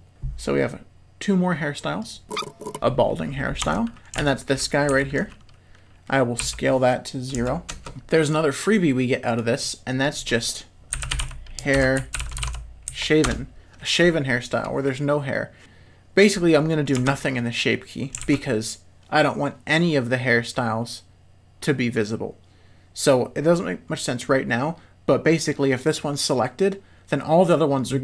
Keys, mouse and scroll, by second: 0.1 Tab, 0.1 z, 2.2 shift+click, 3.6 Tab, 4.2 alt+a, 4.9 l, 5.1 middle click, 6.4 s, 7.9 Tab, 9.4 click, 10.0 click, 10.3-14.0 drag, 17.0 Tab, 18.2 alt+a.